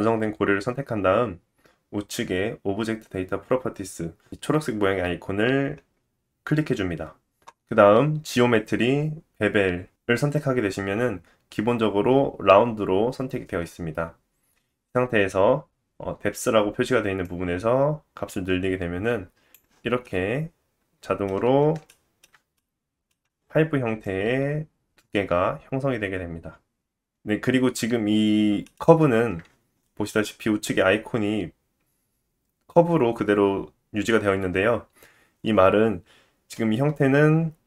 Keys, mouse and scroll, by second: 7.5-20.0 drag, 20.0-21.3 middle drag, 21.4-21.8 scroll up 2, 21.9 shift+middle click, 22.6 middle click, 23.1-24.9 drag, 23.1-24.9 middle drag, 23.1-24.9 right drag.